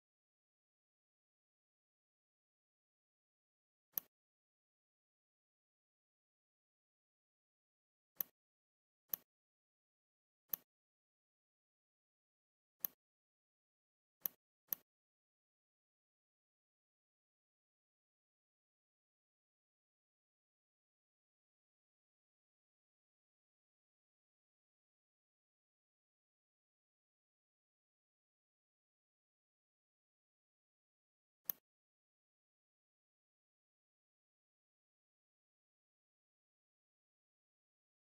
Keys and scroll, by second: 11.8 ctrl+c, 15.7 ctrl+f, 17.5 Left, 18.8 Left, 19.1 Left, 19.2 Left, 19.5 Left, 19.7 Left, 19.9 Left, 20.1 Left, 20.3 Left, 20.6 Left, 22.5 Left, 33.7 Down, 34.0 Down, 34.3 Down, 34.5 Down, 35.2 Down, 37.2 Down.